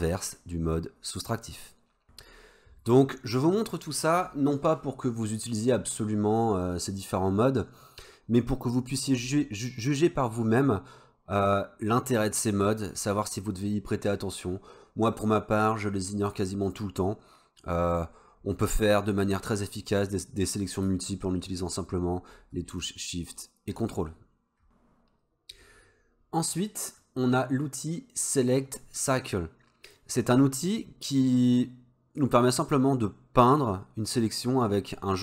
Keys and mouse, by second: 21.2-21.7 shift+drag, 23.0-23.3 ctrl+drag, 27.1-30.0 drag, 31.6-35.2 drag.